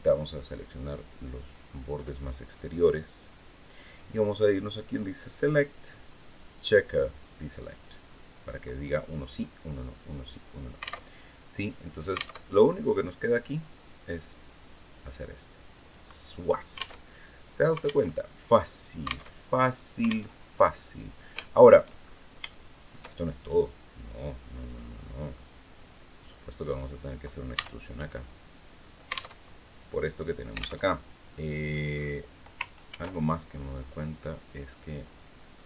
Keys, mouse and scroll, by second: 1.1 shift+right click, 3.0 click, 5.1 click, 7.6 click, 9.2 scroll down 1, 9.5-10.5 middle drag, 10.5 alt+click, 10.8 alt+Tab, 12.1 alt+Tab, 13.2-15.9 drag, 16.1 scroll down 2, 16.7 alt+Tab, 17.8 alt+Tab, 18.1-18.4 alt+scroll down 3, 19.0 alt+Tab, 20.0 alt+Tab, 21.2 shift+click, 21.7-22.2 shift+scroll up 3, 22.3 shift+middle click, 24.4 click, 24.8 middle click, 26.2 right click, 26.5 scroll down 1, 27.3 e, 28.6 alt+click, 29.1 alt+Tab, 30.6 alt+Tab, 31.1 click, 31.7-32.1 scroll up 2, 32.6 ctrl+r, 33.7 click, 35.3 click.